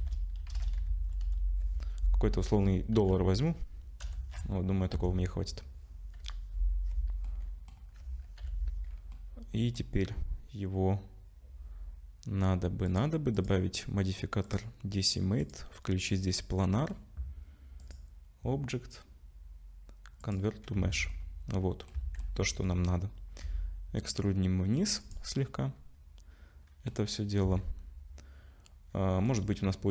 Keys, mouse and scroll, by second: 0.0-1.3 typing, 3.0 /, 4.0 BackSpace, 4.9 Tab, 6.2 /, 7.3 middle click, 8.4 /, 9.1 middle click, 12.9 click, 13.4 click, 16.7 click, 16.7 middle click, 17.8 click, 20.8 Tab, 21.1 middle click, 22.0 a, 22.2 middle click, 23.1-23.4 scroll up 2, 23.4 e, 25.4 middle click, 27.4 a, 29.3 click.